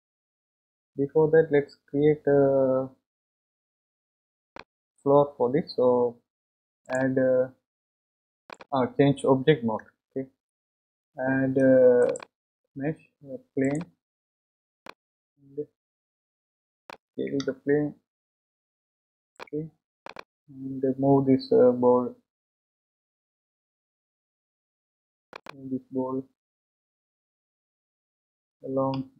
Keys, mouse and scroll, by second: 6.8-8.5 drag, 9.9 Tab, 12.0-14.8 drag, 14.8-17.4 middle drag, 17.5 s, 20.1 click, 24.1 KP_1, 25.3 click, 28.7 g.